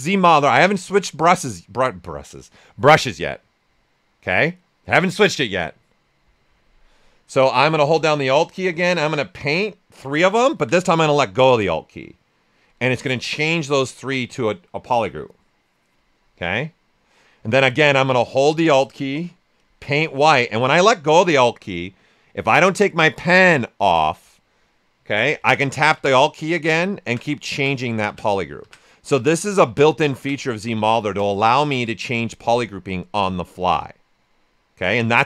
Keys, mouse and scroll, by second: 7.3 right click, 8.8-17.0 alt+drag, 17.0 right click, 19.6-29.5 alt+drag, 32.5-35.2 right drag.